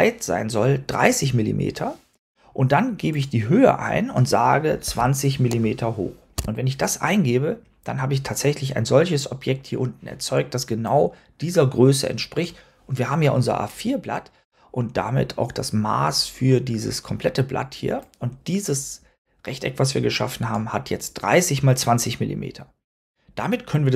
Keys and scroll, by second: 4.5-5.4 typing, 6.2 Tab.